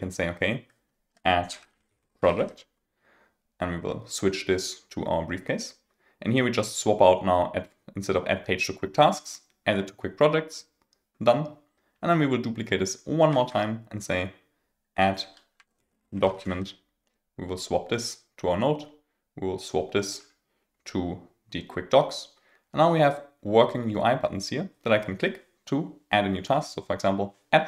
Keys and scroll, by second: 14.6 super+d.